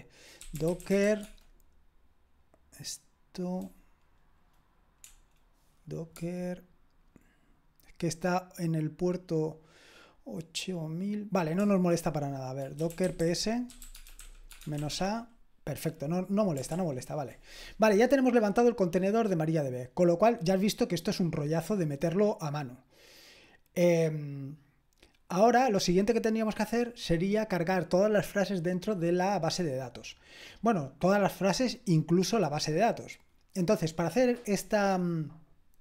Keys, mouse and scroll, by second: 0.1-1.5 typing, 5.0 BackSpace, 6.1 typing, 11.6-15.2 typing, 16.7 ctrl+l.